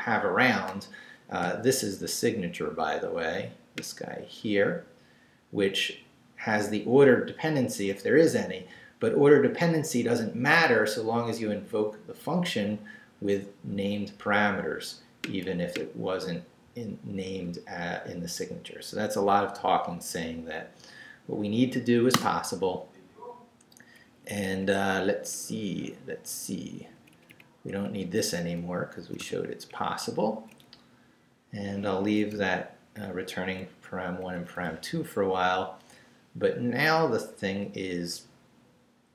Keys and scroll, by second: 22.2 Return, 24.3 Up, 26.6 Down, 29.0 d, 29.7 Up, 32.3 Up, 33.8 Up.